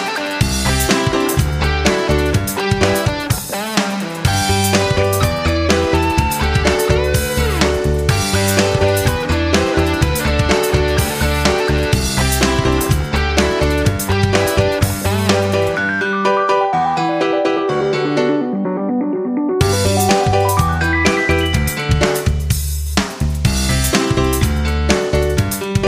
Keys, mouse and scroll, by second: 7.4 F9.